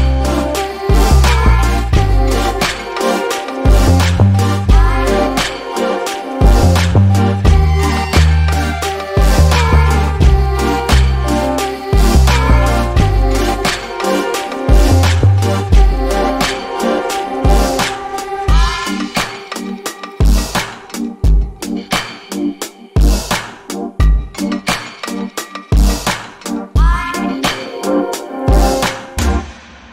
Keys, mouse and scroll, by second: 4.3 double click, 5.2 click, 7.3 middle click, 9.2 alt+click, 9.7 scroll up 1, 10.0 click, 10.9 shift+click, 11.5 middle click, 12.7-13.6 scroll up 1, 13.6 ctrl+click, 22.2 double click, 22.6 alt+click, 24.5 double click, 25.2 alt+click, 27.9 middle click.